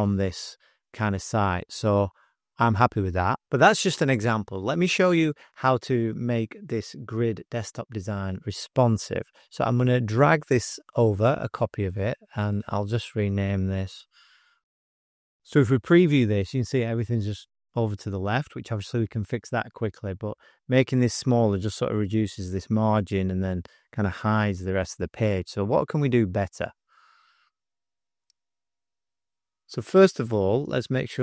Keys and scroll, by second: 5.5 space, 13.0-15.3 typing.